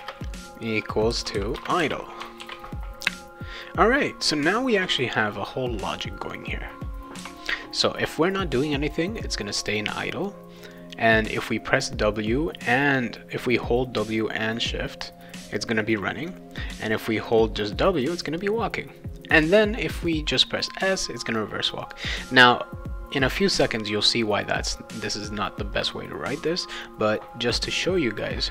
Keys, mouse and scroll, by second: 1.6 Return, 1.8 ;, 2.4 ctrl+s, 6.2 click, 7.1 ;, 9.2-10.3 drag, 10.6 click, 16.0 click, 17.2 click, 18.1 click, 19.6 click, 21.1 click, 21.8 click.